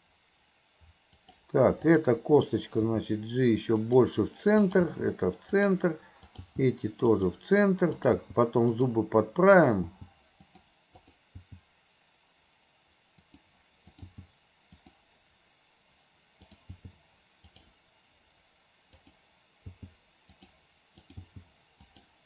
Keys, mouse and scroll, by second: 1.9 click, 4.6 click, 6.3 click, 8.0 click, 9.6 click, 11.0 click, 13.9 click, 16.5 click, 19.0 click, 21.0 click.